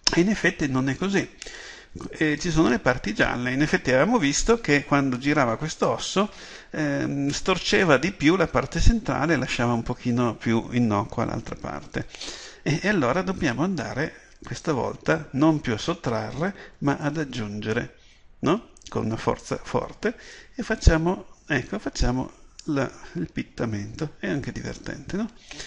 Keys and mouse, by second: 18.9-25.6 drag.